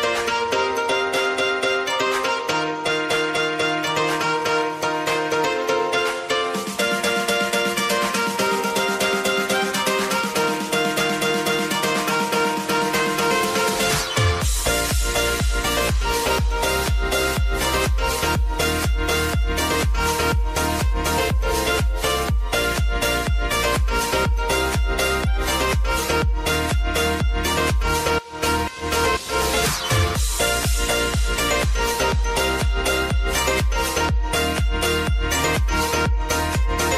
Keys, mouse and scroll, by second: 2.0 space, 5.1 -, 6.1 space, 6.8-8.1 drag, 10.5 F9, 11.0 space, 15.8 space, 17.2 n, 18.1 click, 20.2 n, 21.0-23.5 drag, 23.5 n, 24.1 click, 24.5 space, 31.9 space, 34.1 click, 35.3 space.